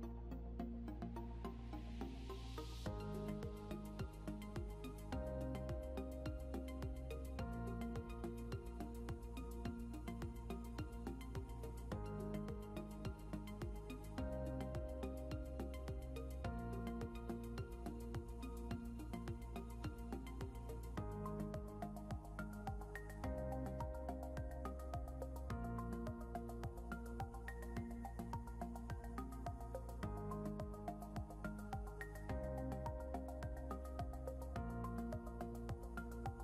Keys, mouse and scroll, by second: 5.4 click, 11.9 scroll up 1, 12.8 click, 14.0 scroll down 1, 15.1 click, 16.2 scroll up 1, 16.7 scroll down 1, 19.7 click, 21.5 scroll up 1, 22.3 click, 24.3 click, 29.4 click, 29.9 scroll up 1, 30.6 click.